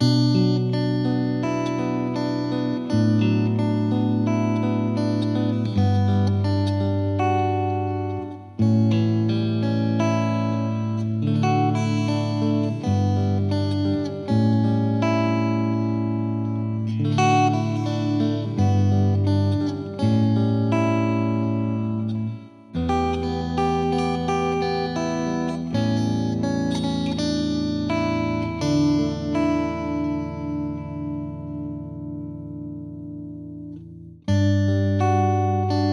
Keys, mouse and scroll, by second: 0.1 scroll up 2, 0.4 z, 0.5-0.9 middle drag, 0.9 click, 1.7 drag, 1.8-2.5 scroll down 10, 2.5 click, 2.6-3.3 scroll down 10, 3.3-5.1 drag, 5.2-6.6 middle drag, 6.6-8.4 drag, 8.4-9.5 middle drag, 9.5 KP_1, 9.8 scroll down 3, 10.0 middle drag, 10.2 click, 10.6 click, 12.1 click, 12.9 middle drag, 13.1 scroll up 2, 13.3-13.6 middle drag, 13.6 scroll down 2, 13.7 click, 14.7 click, 15.1 g, 15.7 middle click, 15.9 scroll down 1, 16.1-16.4 shift+middle drag, 16.4 KP_1, 16.8 g, 17.8-18.2 shift+middle drag, 18.2 ctrl+z, 18.5-19.2 middle drag, 19.2 KP_1, 19.7-20.7 drag, 20.7 scroll up 2, 20.9 shift+middle click, 21.0 scroll down 2, 21.1-21.7 middle drag, 21.7 n, 22.4-22.9 drag, 22.9-23.7 scroll down 1, 23.7-25.6 scroll down 1, 25.6-26.9 scroll down 1, 26.9-28.0 scroll down 1, 28.0-30.1 scroll down 1, 30.1-30.5 scroll down 1, 30.5-35.9 drag.